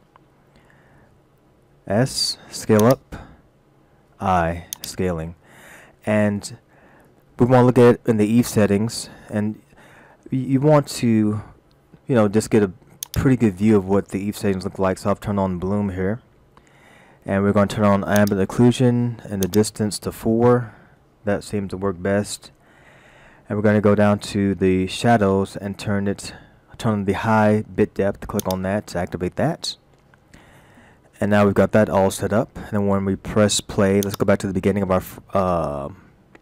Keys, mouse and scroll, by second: 1.5 s, 4.1 i, 5.5-7.1 scroll up 1, 10.1-11.0 scroll up 3, 11.0-13.1 scroll up 3, 13.1 click, 14.3-15.6 scroll up 5, 15.9-16.3 scroll up 4, 16.3 scroll down 1, 16.6-18.2 scroll up 1, 18.2 click, 19.5 click, 22.7-26.3 scroll down 8, 28.4 click, 29.5-31.1 scroll up 1, 31.3 shift+middle click, 34.1 click.